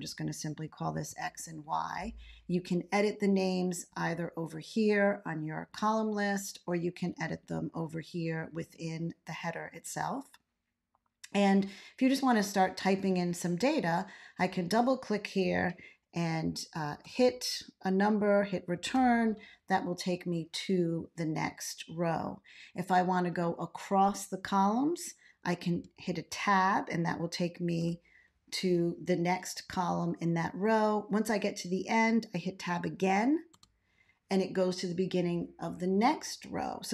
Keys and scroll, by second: 1.0 y, 16.8 1, 17.0 Return, 18.7 2, 25.7 Tab, 27.7 1, 33.5 Tab.